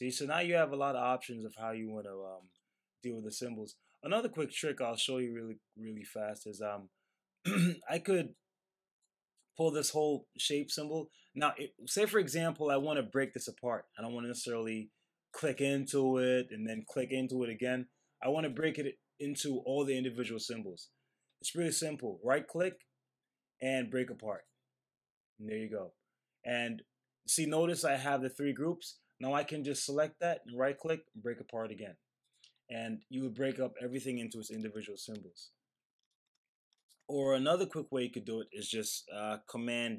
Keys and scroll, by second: 34.9 super+z.